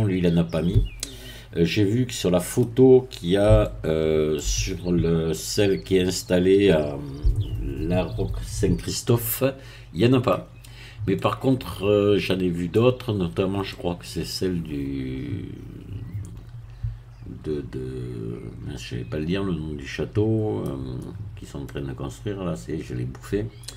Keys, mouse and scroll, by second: 3.6-4.8 shift+middle drag, 5.2 scroll up 2, 5.4-10.4 middle drag, 10.6 scroll down 2, 11.2-13.2 middle drag, 13.2-13.6 scroll up 1, 13.6-21.1 middle drag, 21.4 scroll up 1, 21.6-23.7 middle drag.